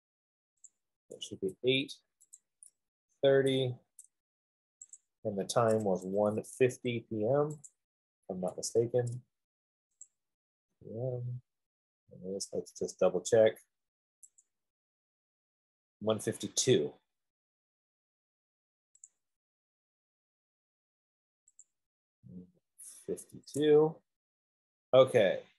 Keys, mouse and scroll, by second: 1.2 click, 2.8 click, 5.0 typing, 5.4 click, 7.1 1, 7.9 click, 8.9 typing, 10.3 click, 11.1 p, 14.8 click, 19.4 click, 22.0 click, 23.5 typing, 24.8 typing.